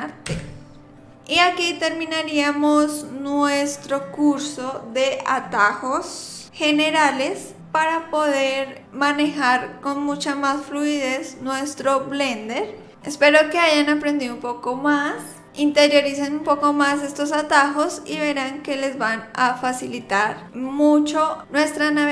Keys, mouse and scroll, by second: 0.2 t.